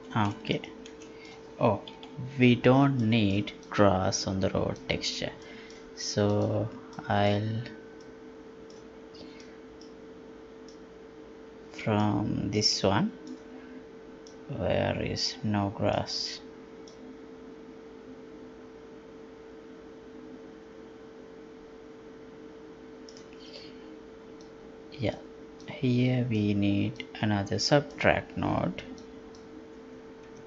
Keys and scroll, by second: 1.9 F11.